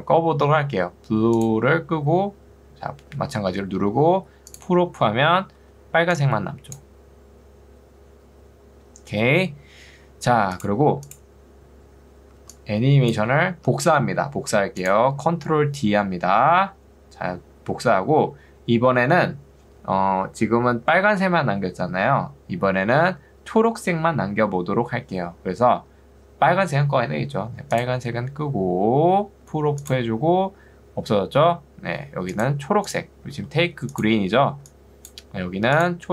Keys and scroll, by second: 5.6 ctrl+2, 9.6 Escape, 12.4 ctrl+2, 13.6 Escape, 16.6 ctrl+d, 33.4 ctrl+2, 34.6 ctrl+2.